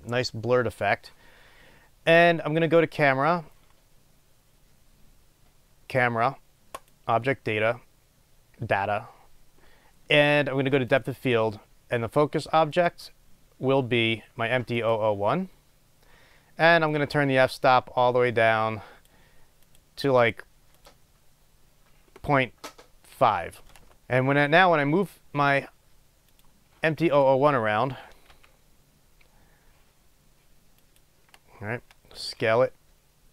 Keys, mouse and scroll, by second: 15.2-23.5 drag, 26.7 click, 28.6 g, 31.1 click, 32.5 s.